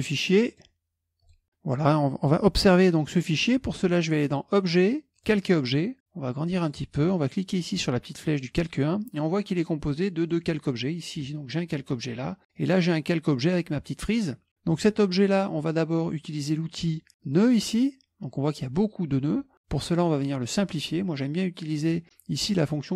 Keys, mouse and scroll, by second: 0.5 click, 1.2 click, 2.9-4.2 middle drag, 4.5 click, 5.2 click, 6.3 click, 8.3 click, 10.3 click, 12.6 click, 14.7 click, 17.3 click, 21.8 click.